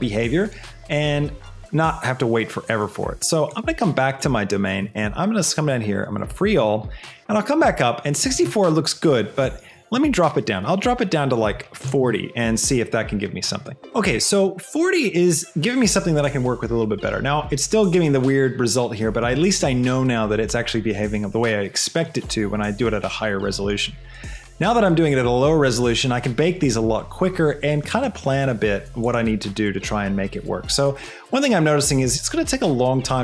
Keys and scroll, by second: 11.5 KP_4, 11.9 KP_0, 12.3 Return.